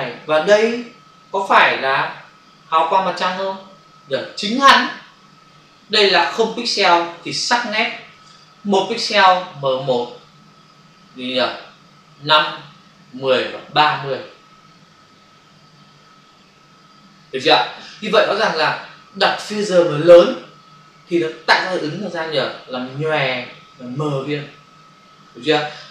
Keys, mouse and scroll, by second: 6.9 ctrl+click, 7.1 ctrl+space, 7.3 ctrl+click, 7.5 ctrl+space, 9.8 space, 11.3 space.